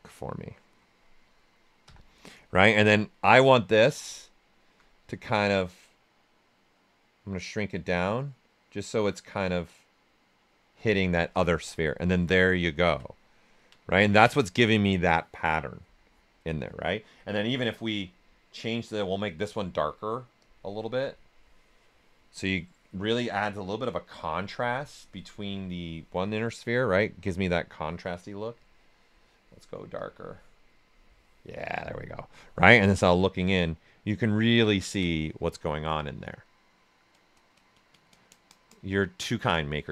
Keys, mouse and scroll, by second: 1.8-2.8 typing, 3.1 ctrl+right click, 3.9-5.3 alt+right drag, 5.3-11.5 drag, 11.5 q, 12.1 ctrl+right click, 13.1 alt+right click, 13.9 ctrl+right click, 17.9-24.8 drag, 26.7-28.5 right drag, 28.5-29.9 drag, 31.7 right click, 32.6 ctrl+right click, 33.8-37.6 ctrl+right drag.